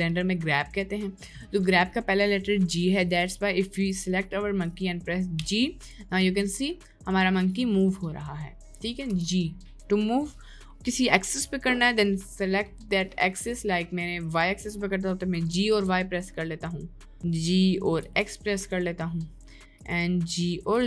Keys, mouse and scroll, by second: 0.1 middle click, 1.6 middle click, 2.7 middle click, 3.9 click, 5.4 g, 8.2 middle click, 8.5 click, 9.2 g, 15.5 g.